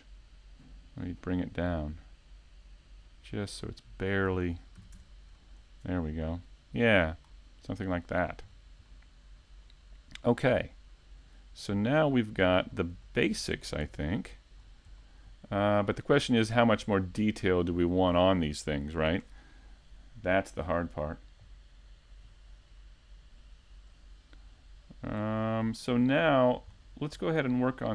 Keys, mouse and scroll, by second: 2.8-3.1 scroll up 1, 3.5 shift+middle click, 3.5-4.7 scroll up 2, 5.2 click, 8.8-9.5 scroll down 3, 9.1-9.5 scroll up 1, 10.0 scroll down 1, 10.3 Tab, 10.6-11.7 scroll up 2, 11.7 Tab, 12.7 a, 14.1 click, 16.4 shift+middle click, 16.8 scroll up 2, 17.2 shift+middle click, 18.5 Tab, 20.0-20.4 scroll down 2, 20.4 shift+middle click, 22.3 click, 25.5 middle click.